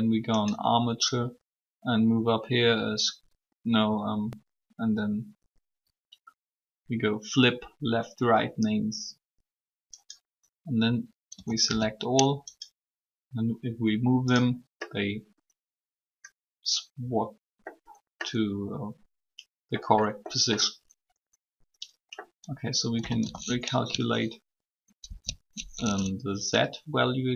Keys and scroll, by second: 11.1 typing, 22.7-23.1 typing, 25.0 ctrl+n.